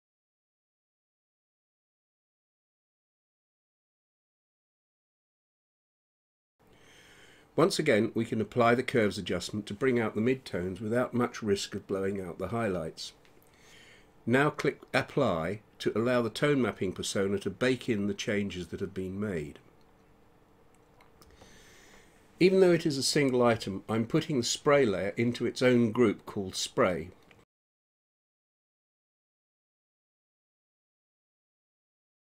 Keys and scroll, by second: 25.5-27.6 typing, 28.2 Return.